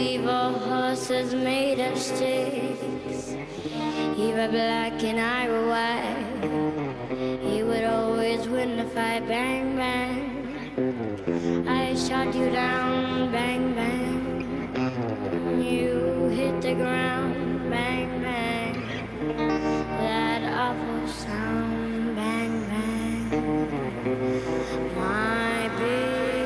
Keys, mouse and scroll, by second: 1.3-9.5 drag, 9.6-14.1 middle drag, 15.5 a, 16.0 a, 19.9 n, 21.1 a, 21.4 a, 22.9-24.8 drag.